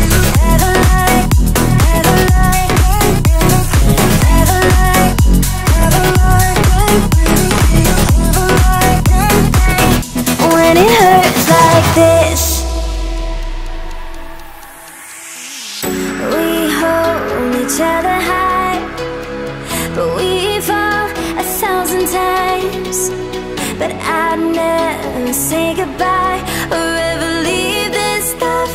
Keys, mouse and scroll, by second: 0.2-1.1 scroll up 3, 1.1 Tab, 1.4 shift+middle click, 1.5-1.9 scroll up 2, 1.9 click, 2.1 click, 3.0 click, 3.2-4.5 drag, 4.6 Tab, 4.7 scroll down 2, 5.5 shift+middle click, 5.5 scroll down 3, 5.7 scroll up 3, 5.9 Tab, 6.3 click, 7.3 Tab, 7.6 scroll down 7, 8.7-9.8 right drag, 10.3-11.4 drag, 12.4 click, 12.9 click, 13.1 Tab, 13.5 a, 14.0 f, 14.3 Tab, 15.0-16.0 drag, 16.5 click, 17.0 KP_0, 17.7 click, 18.4 KP_3, 19.1-20.1 right drag, 21.5 click, 21.8 click, 21.9-23.0 drag, 23.5-25.7 drag, 26.4 click, 26.6 click, 26.8 click, 27.0 middle click, 27.5 scroll, 27.5-28.0 scroll down 2, 28.0 click.